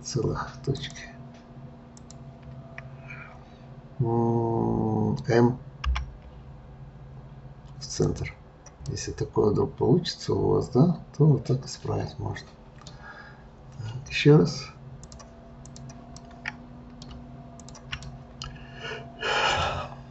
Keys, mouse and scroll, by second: 0.8 shift+click, 2.0 shift+click, 5.9 m, 8.9-12.0 middle drag, 13.3-14.1 scroll down 1, 14.9 click, 15.6 click, 16.1-17.6 middle drag, 17.6 shift+click, 18.1-19.8 middle drag, 19.8-20.1 scroll down 1.